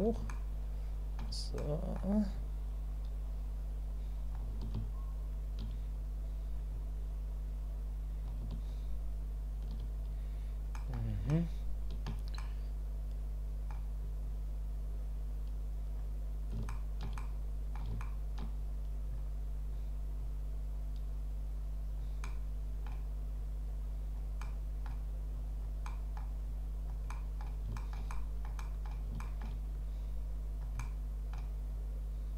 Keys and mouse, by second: 0.3 shift+middle click, 1.6 middle click, 2.4-4.3 drag, 4.8 shift+click, 6.0 click, 6.7-8.2 drag, 8.7-9.8 shift+drag, 10.9 middle click, 11.3 shift+middle click, 12.4-13.7 middle drag, 14.3-15.9 drag, 16.7 shift+middle click, 17.2 middle click, 18.0 shift+middle click, 19.2 click, 20.2-22.0 drag, 22.2 middle click, 23.4 click, 24.4 click, 25.3 click, 25.9 click, 26.4 click, 27.1 click, 27.8 shift+click, 28.1 click, 28.2 middle click, 28.6 click, 29.2 shift+middle click, 29.3 shift+click, 29.8 click, 30.8 click, 31.7-32.3 drag.